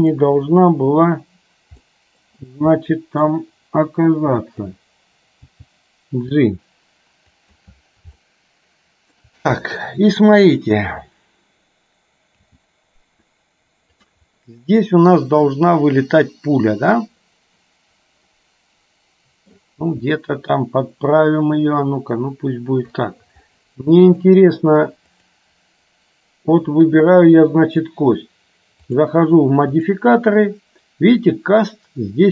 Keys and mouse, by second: 2.0 middle click, 2.9 middle click, 4.6 click, 5.6 g, 8.2-9.2 shift+middle drag, 12.6 g, 14.4-17.0 middle drag, 18.4-19.6 middle drag, 19.9 g, 23.6 middle click, 29.9-32.3 drag.